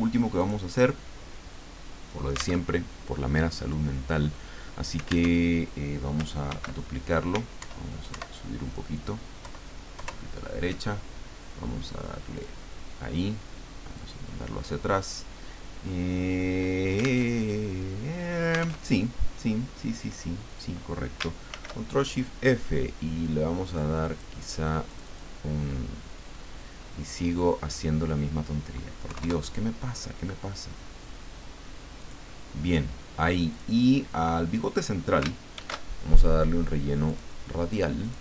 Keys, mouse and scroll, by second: 0.4 click, 2.6 alt+Tab, 5.3 alt+Tab, 6.5 ctrl+d, 7.6 alt+Up, 9.4 alt+Left, 12.3 click, 13.9 click, 17.3 alt+Tab, 18.8 alt+Tab, 21.5 ctrl+shift+f, 23.7 click, 24.9 click, 29.0 KP_3, 29.2 KP_Enter, 32.0 click, 33.5 click, 35.5 ctrl+shift+f, 37.0 click, 38.0 click.